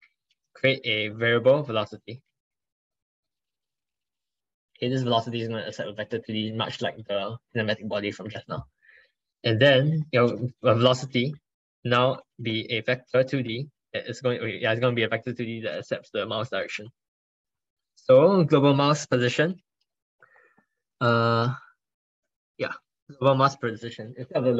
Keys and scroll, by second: 13.8 ctrl+BackSpace.